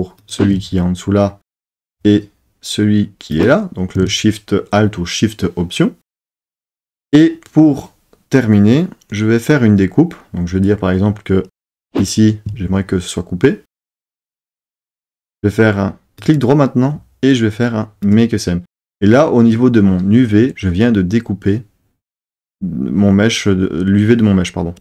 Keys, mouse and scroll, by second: 3.3 alt+shift+click, 16.2-18.1 right drag.